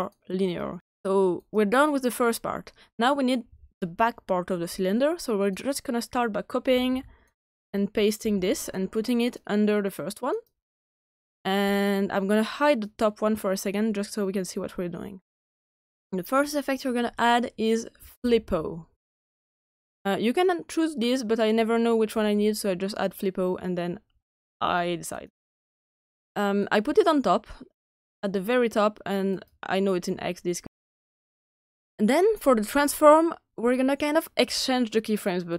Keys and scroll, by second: 6.6 ctrl+c, 8.1 ctrl+v, 17.7-18.9 typing.